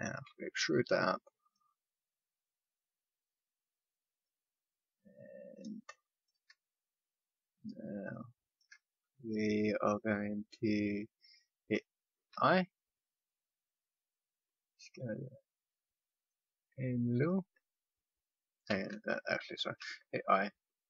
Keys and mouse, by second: 0.2 e, 3.4-5.5 drag, 12.3 i, 18.6 ctrl+z, 19.7 i.